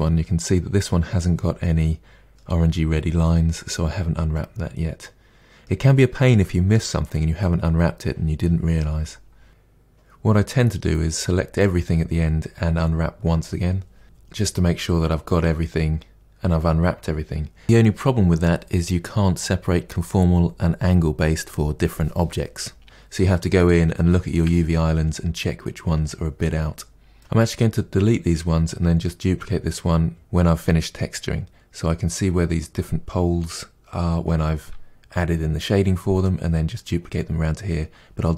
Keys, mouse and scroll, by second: 9.5-9.8 scroll up 1, 9.8 Tab, 9.9 click, 9.9 Tab, 10.1 middle click, 10.7 KP_Divide, 10.9 middle click, 11.1 2, 11.3 alt+click, 11.4 shift+middle click, 12.2 ctrl+e, 12.5 3, 12.8 ctrl+e, 12.9 a, 13.2 u, 13.7 scroll down 2, 13.9 KP_Divide, 14.1 shift+middle click, 14.9-15.4 scroll down 2, 15.0 shift+middle click, 15.4 shift+middle click, 15.5 Tab, 15.6 click, 15.8 KP_Decimal, 16.0 Tab, 16.1 middle click, 16.6 KP_Divide, 16.8 middle click, 17.0 2, 17.2 alt+click, 17.6 ctrl+e, 17.8 3, 18.1 ctrl+e, 18.3 middle click, 18.5 a, 18.7 u, 18.8 middle click, 19.1-19.7 scroll down 2, 19.3 middle click, 19.4 KP_Divide, 19.7 middle click, 20.5 Tab, 20.6 click, 20.9 middle click, 21.2 Tab, 21.5 middle click, 22.6 KP_Divide, 23.0 alt+click, 23.5 Delete, 23.6 Tab, 23.8 KP_Divide, 24.0 middle drag, 24.1 scroll up 2, 24.4 1, 24.8 ctrl+z, 24.9 Tab, 25.1 1, 25.2 click, 25.5 g, 25.7 Tab, 25.9 middle drag, 26.1 Tab, 26.2 scroll down 1, 26.3-26.8 middle drag, 26.8 Tab, 26.9 scroll down 1, 27.0 middle click, 27.2 click.